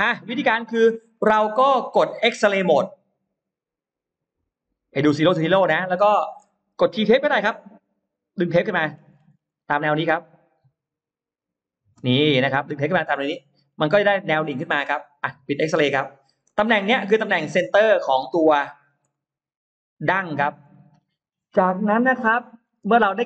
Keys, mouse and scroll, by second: 0.4 scroll down 1, 1.0 middle click, 1.4-2.2 scroll up 4, 4.3 click, 5.4-5.7 scroll up 1, 5.7 middle click, 7.0 scroll up 1, 8.5 click, 8.5 t, 8.7-9.5 scroll down 2, 11.2 click, 12.1-13.3 scroll up 3, 12.1 space, 13.1 middle click, 13.5-14.1 scroll down 2, 15.2 click, 15.7-16.5 scroll up 4, 16.3 middle click, 16.9-17.2 scroll down 2, 17.4 click, 18.0-19.0 scroll up 4, 19.0 middle click, 19.9-20.7 scroll down 4, 20.5 middle click, 21.1-22.8 scroll up 6, 22.3 middle click, 22.8 space, 22.9 click.